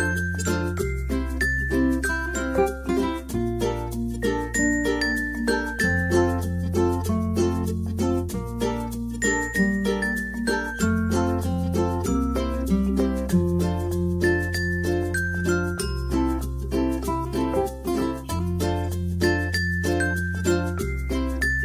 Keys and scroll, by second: 0.0-1.1 typing.